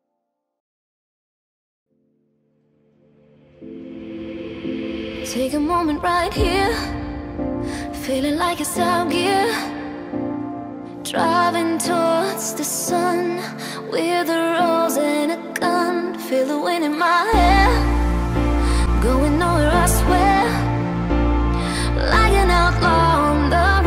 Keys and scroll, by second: 0.8 z, 10.2 g, 11.8 alt+e.